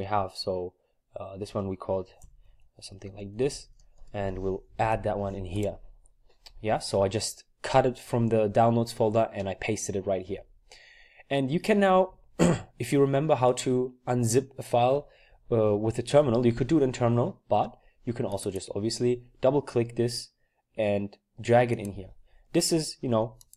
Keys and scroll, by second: 1.4-3.9 typing, 4.0 Return, 4.8 ctrl+v.